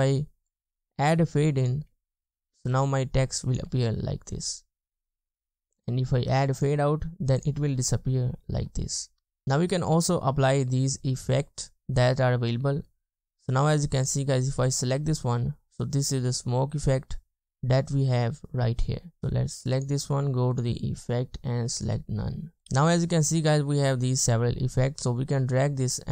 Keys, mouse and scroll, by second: 1.9 space, 2.6 space, 3.8 space, 4.5 space, 7.8 space, 8.7 space, 9.3 space, 15.0 space, 16.9 space, 19.2 space.